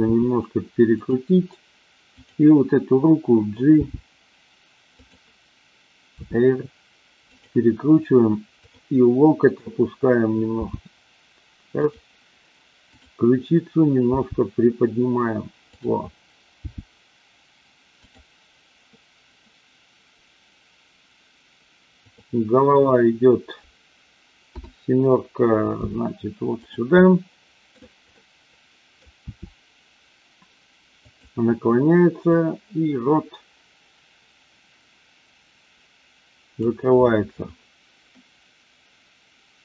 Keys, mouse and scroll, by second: 0.1 r, 0.9 click, 2.1 click, 3.8 g, 5.1 click, 6.2 r, 8.5 click, 10.6 g, 11.8 click, 12.8 click, 14.1 g, 15.7 click, 16.7 g, 18.0 click, 24.4 KP_7, 25.8 r, 27.1-27.7 middle drag, 27.7 scroll down 1, 28.2-29.1 middle drag, 29.2 r, 30.9 click, 32.3-36.7 drag.